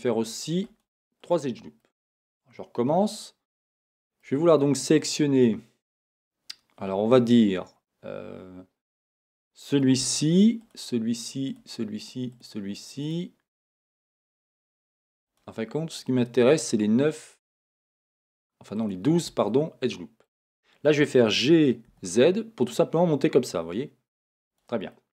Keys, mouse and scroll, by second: 1.2 click, 2.1-8.7 middle drag, 8.7 click, 10.6 shift+click, 11.5 shift+click, 12.3 shift+click, 13.0 shift+click, 13.7 shift+click, 14.3 shift+click, 15.3 shift+click, 16.6 shift+click, 17.3 shift+click, 18.0 shift+click, 18.8 shift+click, 19.5-24.6 middle drag, 21.0 g, 24.6 click, 24.9 middle click.